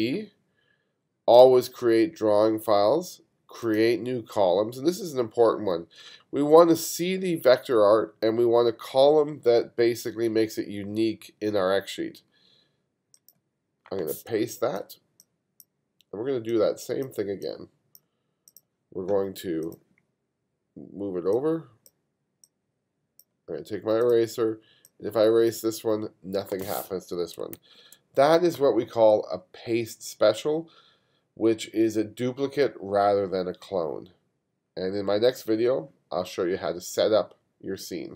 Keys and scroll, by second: 14.5 space, 27.6 super+z.